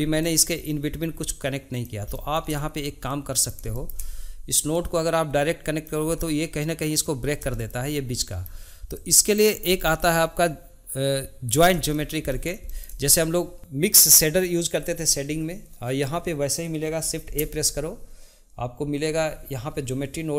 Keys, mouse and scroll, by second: 0.2-2.1 drag, 2.1 shift+middle click, 3.1 click, 3.7-4.7 shift+middle drag, 4.7-7.5 drag, 7.5-8.5 shift+middle drag, 8.5-9.0 scroll down 1, 9.0 click, 9.8-14.9 shift+middle drag, 17.2 shift+a.